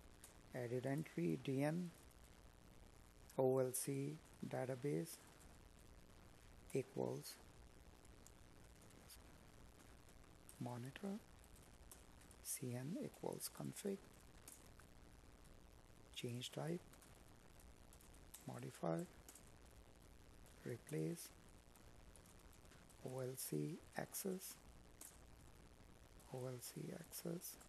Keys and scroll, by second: 7.3 Tab, 12.1 Tab, 15.0 space, 17.8 Tab, 21.3 space.